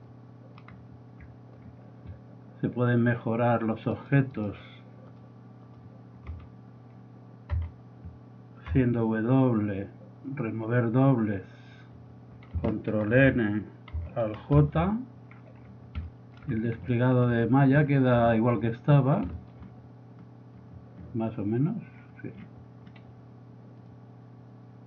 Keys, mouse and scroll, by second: 0.3 middle click, 0.4 middle click, 0.8 scroll up 1, 0.9 middle drag, 1.3 middle drag, 1.8 middle drag, 4.4 right drag, 5.3-5.8 drag, 6.4 z, 7.5 a, 8.7 w, 13.2 ctrl+n, 14.6 alt+j, 22.8 middle click.